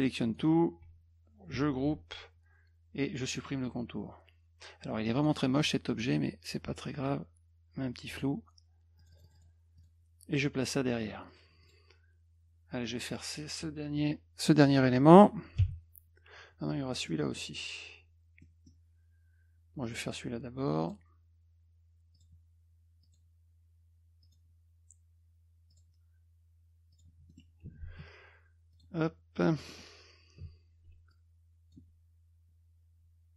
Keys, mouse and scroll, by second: 1.5 ctrl+g, 3.3 middle click, 5.1 click, 5.3 click, 5.6 click, 7.0-8.2 drag, 9.0 click, 9.1 click, 9.2 click, 9.3 click, 9.8 click, 11.3 click, 11.6 click, 15.6 b, 17.1 middle click, 18.4 middle click, 20.8 click, 22.1 click, 23.0 click, 24.2 click, 25.7 click, 26.9 click, 27.3 middle click, 28.7 click, 29.6 middle click, 31.1 shift+click.